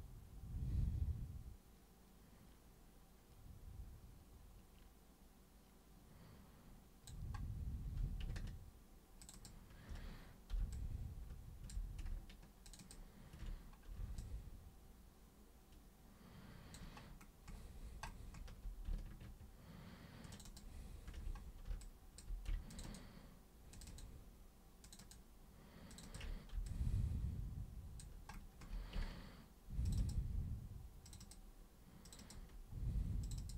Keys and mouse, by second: 9.2 ctrl+shift+super+click, 9.3 ctrl+shift+super+click, 10.7 alt+super+click, 12.7 ctrl+shift+super+click, 14.2-16.7 alt+super+drag, 20.3 ctrl+shift+super+click, 21.8 alt+super+click, 22.7 ctrl+shift+super+click, 23.7 ctrl+shift+super+click, 24.8 ctrl+shift+super+click, 25.0 ctrl+shift+super+click, 25.9 ctrl+shift+super+click, 26.0 ctrl+shift+super+click, 26.6-28.0 alt+super+drag, 29.8 ctrl+shift+super+click, 31.1 ctrl+shift+super+click, 31.2 ctrl+shift+super+click, 32.1 ctrl+shift+super+click, 32.2 ctrl+shift+super+click, 33.2 shift+super+click, 33.4 shift+super+click.